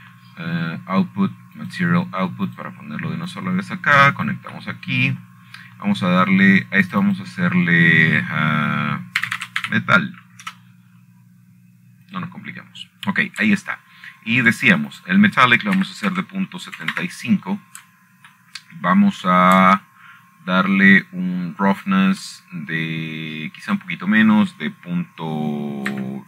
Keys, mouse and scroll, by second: 0.5 click, 0.5 click, 1.1-2.1 drag, 2.0 shift+a, 4.3 click, 5.2 click, 6.0-7.1 drag, 7.3 click, 8.0-8.9 middle drag, 9.6 click, 9.8-10.9 drag, 11.9-12.3 typing, 13.2 Return, 14.8 click, 17.1 shift+middle click, 17.6 click, 18.5 ., 18.8 KP_7, 19.5 KP_5, 19.7 Return, 21.7 shift+middle click, 24.8-25.7 shift+middle drag.